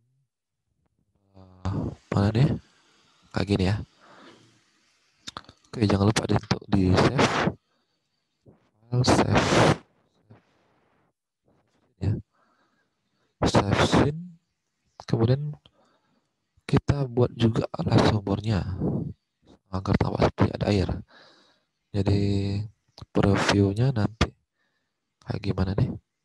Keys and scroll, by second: 15.7 alt+Tab.